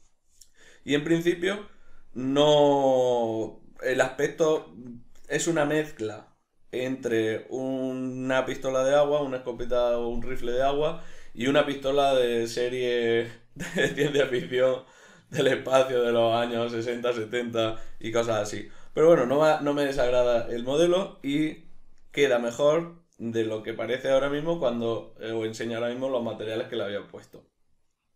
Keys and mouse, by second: 0.6-1.8 middle drag, 3.4-4.0 middle drag, 4.3 ctrl+middle click, 4.6 middle click, 14.1-28.1 middle drag.